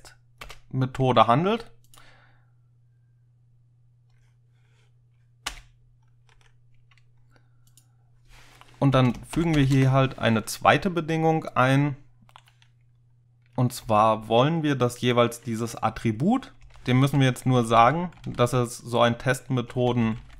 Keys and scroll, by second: 0.5 Return, 5.5 Return, 6.4 Right, 9.0 Return, 9.4-9.8 typing, 13.9 a, 16.7-20.3 typing.